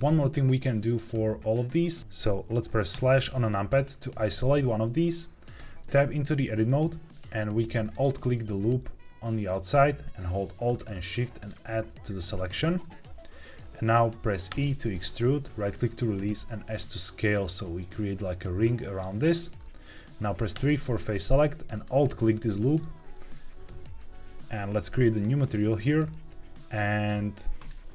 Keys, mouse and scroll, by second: 2.0 ctrl+s, 4.6-5.0 middle drag, 5.5 Tab, 7.7 alt+click, 10.6 alt+shift+click, 11.3 alt+shift+click, 12.0 alt+shift+click, 13.2 middle click, 14.4 e, 15.6 right click, 16.1 s, 19.1 click, 19.5 middle click, 20.1 scroll up 1, 20.5 3, 21.6 alt+click, 23.6 ctrl+s, 25.0 click, 27.5 click.